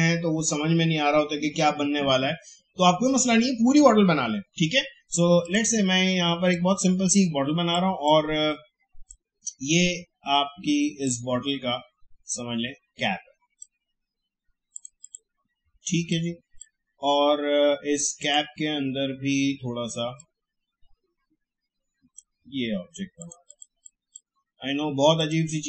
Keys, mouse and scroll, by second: 5.4-25.6 drag.